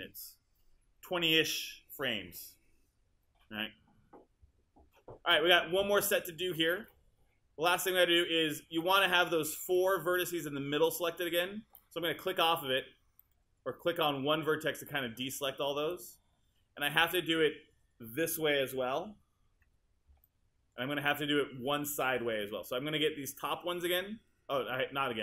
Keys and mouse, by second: 8.8-10.3 drag, 10.3-11.7 right drag, 20.3-21.5 alt+drag.